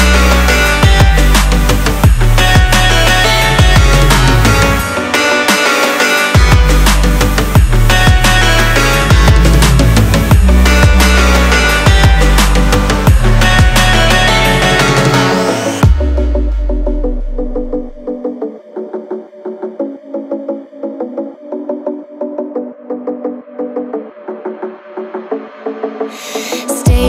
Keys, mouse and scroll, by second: 8.9-27.0 drag.